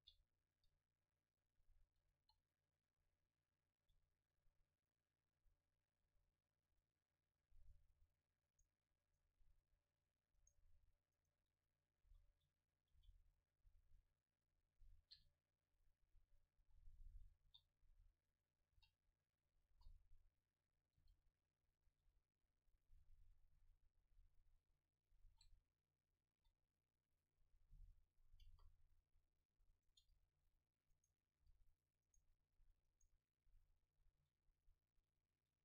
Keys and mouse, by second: 0.0 r, 0.6-3.2 drag, 0.6 g, 2.2 KP_3, 3.9 r, 4.9-6.0 drag, 6.0 r, 7.5-9.1 middle drag, 9.1-13.5 right drag, 12.1 ctrl+j, 13.5 m, 15.2 KP_Divide, 16.7 KP_7, 17.5 s, 18.5-19.7 drag, 18.8 g, 19.7 KP_0, 21.0 g, 21.9-24.7 drag, 22.1 s, 23.5 KP_7, 24.6 shift+d, 25.1 click, 25.3 r, 26.4 s, 27.8 g, 28.5 KP_0, 29.8 right click, 30.3 Delete, 31.0 right click, 31.4 Delete, 32.3 Tab, 33.3-34.5 middle drag.